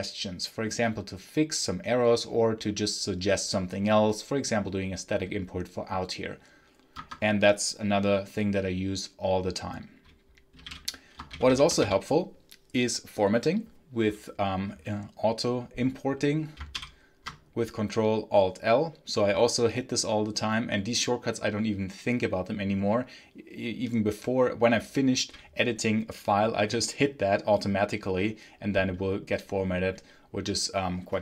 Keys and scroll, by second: 6.8 Escape, 10.1-11.7 typing, 16.6 ctrl+alt+l.